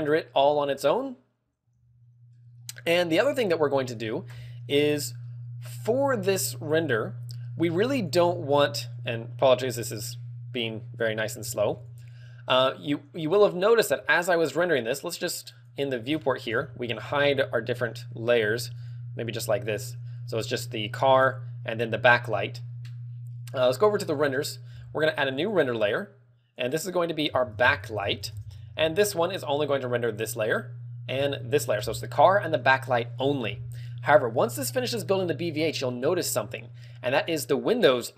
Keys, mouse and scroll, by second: 10.9 click, 11.8 ctrl+w, 15.1 shift+click, 15.9 shift+click, 16.4-17.6 scroll down 19, 19.6 shift+click, 24.3 click, 25.6 click, 26.4 click, 26.8 click, 28.7 click, 31.1 click, 32.3 shift+click, 36.7 KP_1, 37.3 KP_1.